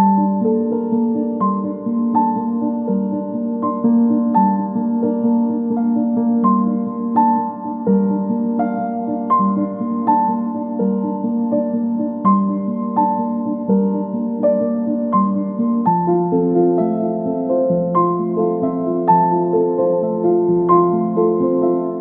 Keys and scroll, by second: 10.5 space, 10.8 Escape, 12.7 ctrl+z, 17.2 Escape.